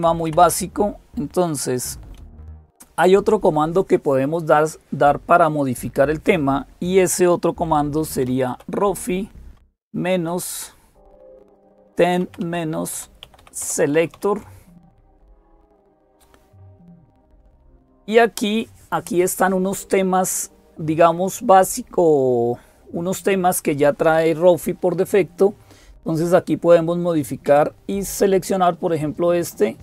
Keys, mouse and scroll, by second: 0.0-29.8 typing, 0.1 Up, 0.2 Up, 2.0 Escape, 15.3 Return, 27.3 Down.